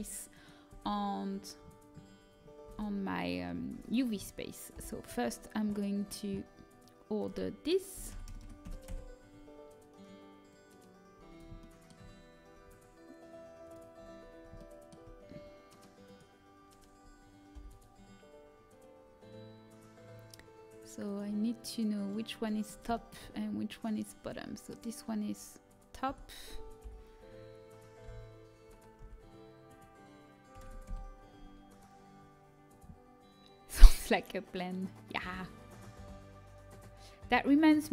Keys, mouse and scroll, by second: 0.2 right click, 0.6 Tab, 1.2-2.2 drag, 2.6 a, 4.7 ctrl+p, 7.8 click, 8.3 KP_0, 10.4-16.0 drag, 16.0-17.5 middle drag, 16.2-17.5 right drag, 17.5 click, 17.5 l, 21.0-22.9 right drag, 22.0-25.4 middle drag, 23.6-25.4 right drag, 26.0 a, 26.7 m, 28.0 l, 28.9 r.